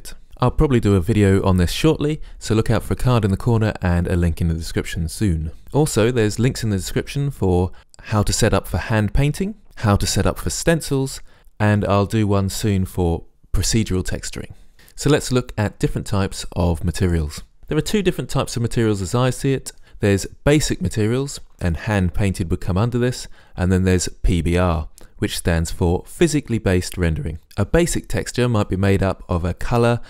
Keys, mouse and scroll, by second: 1.7 click, 2.2 middle click, 2.3 middle click, 2.6 click, 4.6 click, 4.9 click.